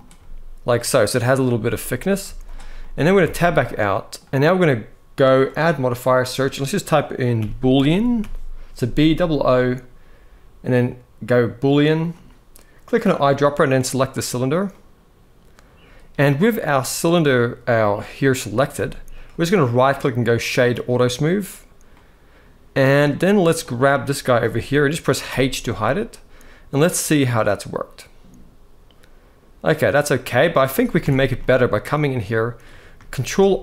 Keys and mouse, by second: 1.3 s, 1.7 click, 2.0 z, 2.5 middle click, 3.0 Tab, 3.4-3.9 middle drag, 5.2-11.8 drag, 7.7 o, 14.4-15.5 middle drag, 18.3 click, 18.5 g, 19.3-20.6 right drag, 21.7-22.8 middle drag, 23.4 click, 25.0 h, 25.4-30.0 middle drag, 30.8 Tab, 31.2 middle click, 33.0 ctrl+r.